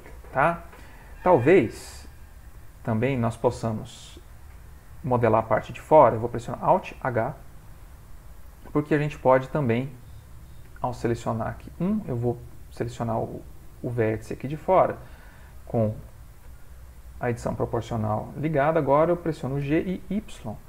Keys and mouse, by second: 1.0 middle click, 1.1 middle click, 2.4 click, 6.8 alt+h, 10.7 1, 11.2 click, 16.0 o, 19.6 g.